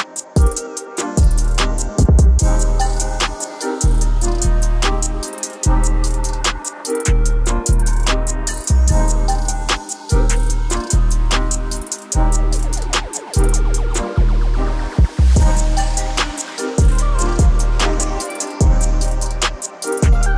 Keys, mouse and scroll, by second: 4.5-7.8 drag, 9.6-13.5 drag, 13.5-20.3 drag.